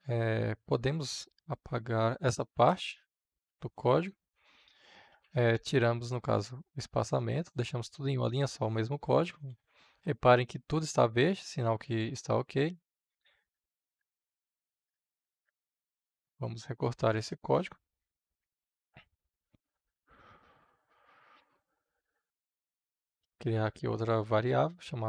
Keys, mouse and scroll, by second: 4.3 space, 6.2-16.6 drag, 18.1 ctrl+x, 22.0 click, 22.9 Return, 24.0 Tab.